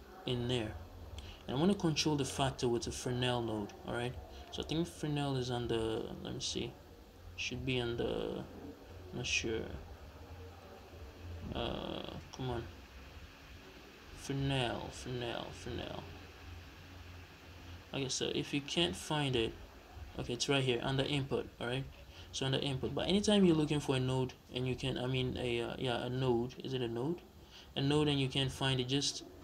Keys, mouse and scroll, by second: 1.6 click, 2.9 shift+a.